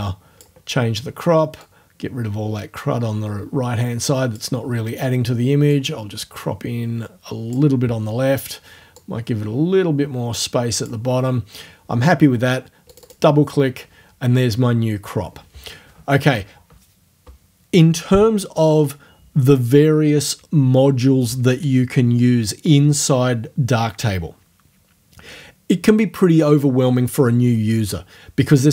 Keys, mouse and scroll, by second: 1.6-4.5 drag, 5.7-7.7 drag, 9.0-11.0 drag, 12.9 click.